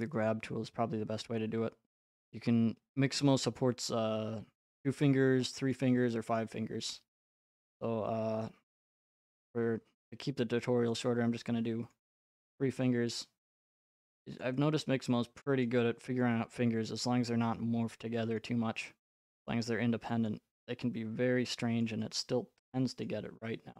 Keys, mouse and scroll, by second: 0.2 click, 3.6 click, 6.4 right click, 8.8 click, 11.9 click, 11.9 right click, 14.4 click, 15.6 right click, 17.3 click, 18.4 right click, 20.3 click, 21.8 click, 23.1 right click.